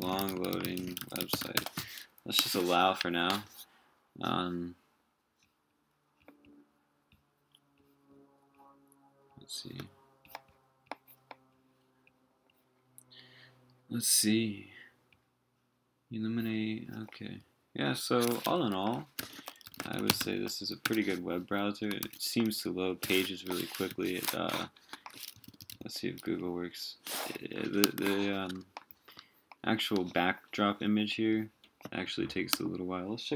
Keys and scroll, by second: 19.2 super+t, 22.0 super+w, 23.9 super+t.